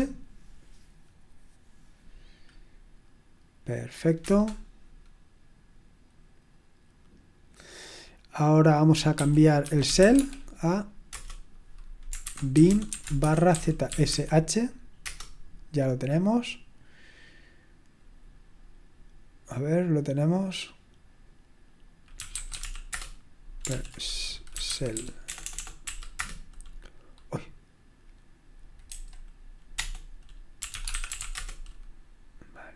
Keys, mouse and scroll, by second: 4.4 Return, 8.9-15.2 typing, 15.0 Return, 21.9-23.1 typing, 23.7 ctrl+p, 24.6-26.3 typing, 28.9 typing, 30.3-32.7 typing.